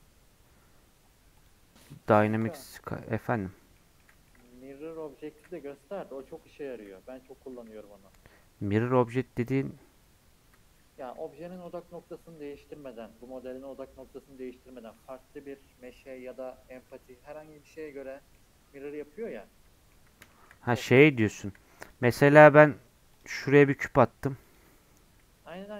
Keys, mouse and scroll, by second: 3.5 scroll down 1, 3.8 middle click, 4.1 scroll up 2, 4.3 middle click, 4.5 z, 6.8 z, 9.2 middle click, 9.6-11.1 scroll up 3, 11.5 click, 12.4-16.3 middle drag, 16.3-16.9 scroll down 2, 16.9-21.8 middle drag, 21.8 click, 22.5 shift+a, 23.5 scroll down 1, 23.7 g, 25.4 KP_7.